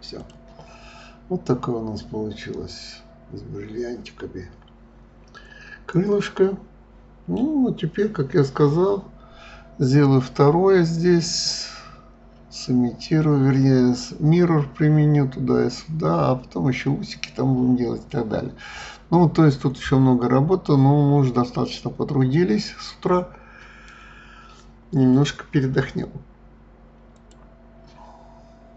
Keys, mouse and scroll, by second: 0.2 click, 0.9-1.4 scroll down 1, 1.4-4.4 middle drag, 7.4 scroll down 4, 18.2 scroll down 2, 18.9 scroll up 2.